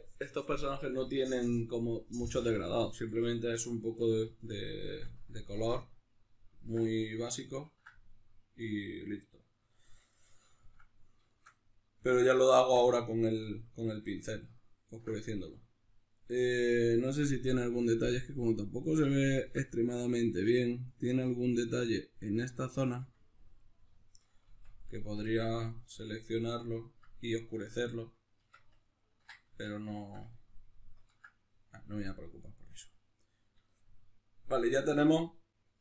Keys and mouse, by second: 18.1 click, 23.7-35.8 middle drag, 24.6 Tab, 28.5 Tab, 29.7 Tab.